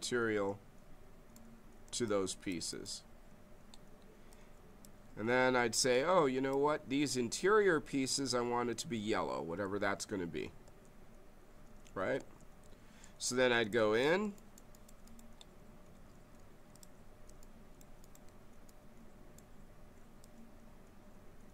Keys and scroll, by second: 10.6 space, 12.1 space, 13.6 space.